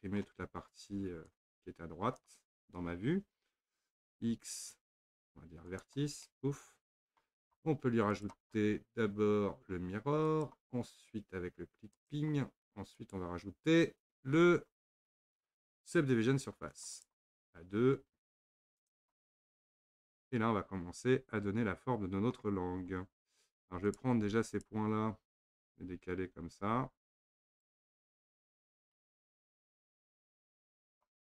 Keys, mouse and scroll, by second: 0.3-0.6 scroll up 1, 1.3 click, 4.1 x, 6.3-8.1 middle drag, 8.1-11.1 drag, 11.9 click, 13.0-16.0 drag, 18.8 click, 19.7-22.4 middle drag, 22.4 scroll down 1, 22.6-23.0 scroll up 2, 23.9 click, 24.5 shift+click, 25.7 click, 28.2 drag, 28.6 shift+click, 29.5 click.